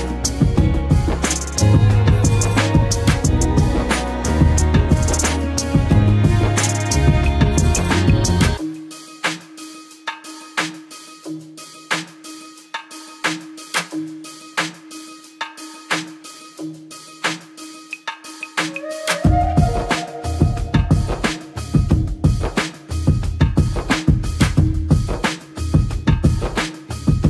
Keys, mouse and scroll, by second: 2.1-3.1 drag, 7.0 space, 7.1 click, 7.3-7.7 space, 9.2 click, 21.7 click, 24.8 click.